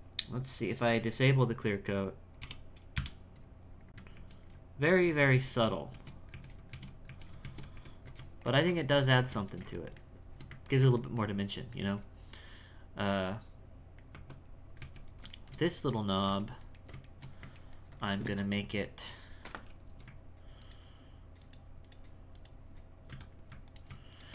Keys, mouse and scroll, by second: 0.4-3.5 drag, 4.1 ctrl+z, 4.9 ctrl+shift+z, 5.9 ctrl+shift+z, 6.7 ctrl+shift+z, 7.4 ctrl+shift+z, 8.5-14.1 ctrl+shift+middle drag, 14.1 Tab, 14.8 z, 15.3 shift+middle click, 16.4-19.1 ctrl+middle drag, 19.1-19.9 scroll up 3, 20.6 alt+right click, 21.4 alt+right click, 21.8 alt+right click, 22.3 alt+right click, 23.6 alt+right click, 24.1 alt+shift+right click.